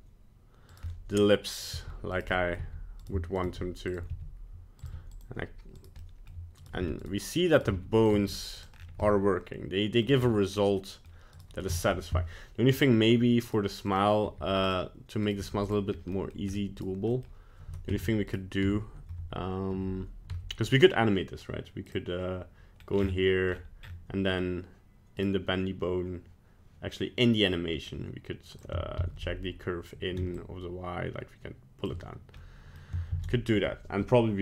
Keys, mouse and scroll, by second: 0.9 middle click, 1.6 right click, 1.7-4.8 typing, 2.3 middle click, 3.4 right click, 5.8 right click, 6.0 middle click, 6.2 middle click, 6.6 right click, 6.8 r, 7.6 right click, 7.7 r, 8.1 g, 8.7 scroll down 3, 9.0 middle click, 10.0 middle click, 10.2-10.8 scroll up 4, 10.8 middle click, 11.0 middle click, 11.3 right click, 11.7 shift+middle click, 12.7 scroll down 3, 13.4 right click, 13.9 right click, 14.2 g, 15.2 right click, 15.4 g, 15.9 scroll up 1, 16.1 middle click, 16.5 scroll up 2, 16.8 right click, 17.1 middle click, 17.9 Tab, 18.3 right click, 18.6 Tab, 19.7 Tab, 20.3 Tab, 20.7 right click, 21.8 click, 22.8 scroll up 1, 22.9-23.8 scroll down 13, 23.8-24.2 scroll up 7, 24.2-24.8 scroll down 2, 25.2 right click, 27.8 click, 29.0 ctrl+z, 30.3 shift+click, 32.4 middle click, 33.2 ctrl+z.